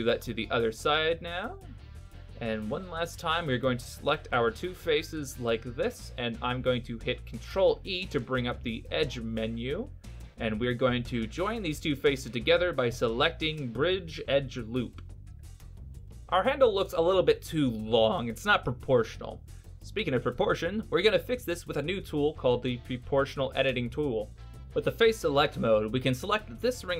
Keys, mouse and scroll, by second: 2.1 middle click, 3.7 middle click, 5.3 shift+right click, 7.0 ctrl+e, 11.5 middle click, 15.9 right click, 16.2 middle click, 18.4 alt+right click, 19.3 middle click.